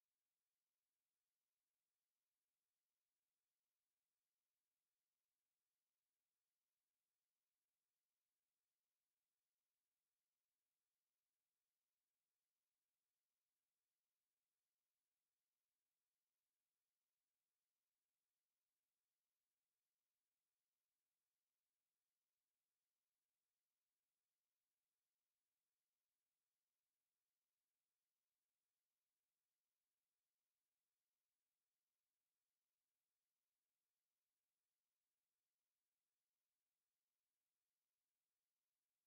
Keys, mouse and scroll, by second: 3.7 KP_1, 6.0 click, 6.4 space, 7.6 click, 10.3 click, 12.0 click, 14.3 click, 15.0-15.3 scroll up 1, 20.9 ctrl+click, 22.8 click, 23.6 click, 24.4 ctrl+click, 26.4 click, 28.6 click, 30.5 click, 32.2 click, 35.8 click, 37.8 click.